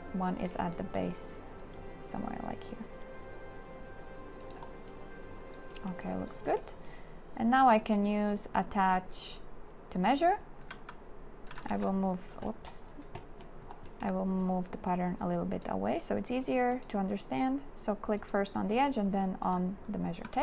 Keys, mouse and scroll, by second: 10.6 a, 10.9 q, 11.6 click, 11.8 1, 20.2 q.